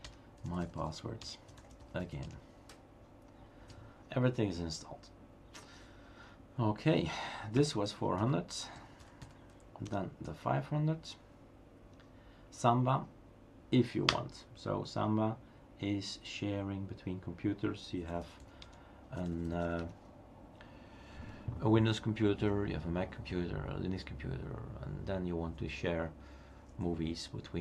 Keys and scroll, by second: 0.0-3.2 typing, 7.6 Up, 10.0-10.7 typing, 14.1 Return, 17.8-20.3 typing.